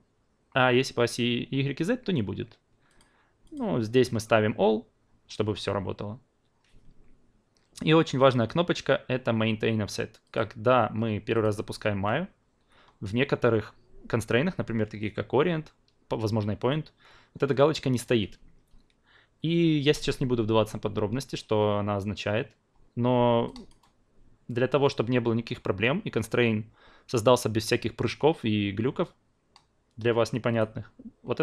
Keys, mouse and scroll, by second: 2.9 click, 3.4 click, 23.7-30.6 drag.